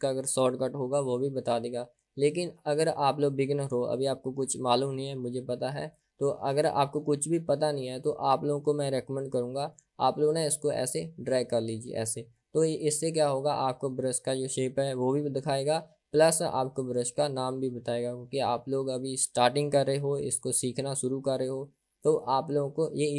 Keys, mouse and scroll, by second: 10.9-13.0 drag.